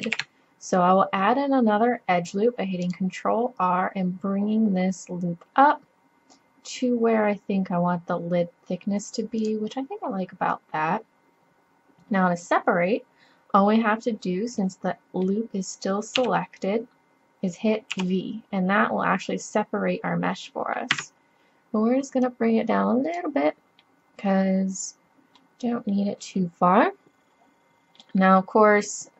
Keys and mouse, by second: 0.1 ctrl+r, 10.1-13.0 middle drag, 14.6 middle click, 16.2 KP_3, 17.9 v, 22.3-23.9 drag, 23.8 middle click, 24.5 click, 25.8 middle click, 27.9 middle click.